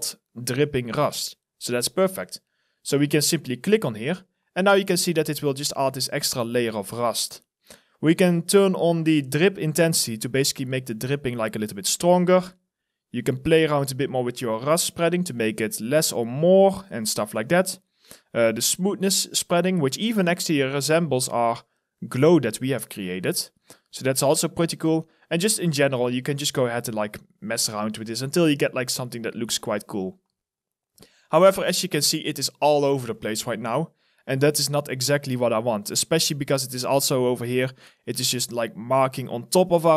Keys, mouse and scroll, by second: 4.0 alt+click, 4.6 alt+right click, 5.1 alt+click, 5.6 alt+middle click, 5.9 alt+right click, 6.6 alt+click, 19.3 alt+right click, 24.3 alt+right click, 25.0 alt+middle click, 30.6 alt+right click, 31.0 alt+middle click, 31.9 alt+click, 32.4 alt+middle click, 32.9 alt+right click, 33.4 alt+click, 33.9 alt+middle click, 34.7 alt+middle click, 35.8 alt+right click, 36.2 alt+click.